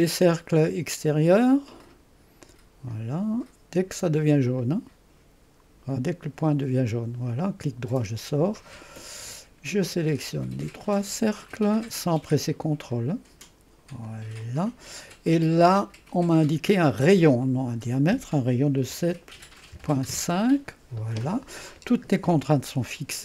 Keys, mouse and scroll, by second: 1.8 click, 2.5 click, 4.1 click, 4.6 click, 6.2 click, 6.9 click, 7.7 right click, 10.2 click, 11.5 click, 12.9 click, 13.7-18.9 drag, 18.7-20.2 typing.